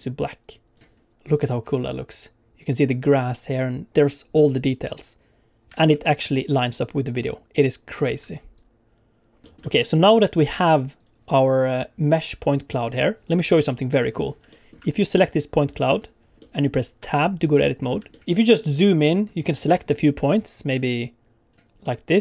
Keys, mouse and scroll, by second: 1.1 click, 1.1 n, 1.4 space, 5.9 alt+shift+z, 8.1 space, 8.5 click, 9.5 shift+middle click, 9.5 scroll down 5, 9.7 middle click, 10.4 click, 12.8 click, 13.6 middle click, 14.0 scroll up 4, 14.4 shift+middle click, 14.9 click, 15.9 middle click, 16.3 middle click, 17.1 Tab, 17.7 scroll up 2, 18.1 shift+middle click, 18.2 alt+a, 18.2 scroll down 4, 18.3-18.7 scroll up 2, 18.7 scroll down 1, 18.9-19.7 scroll up 8, 20.6 click, 21.8 middle click.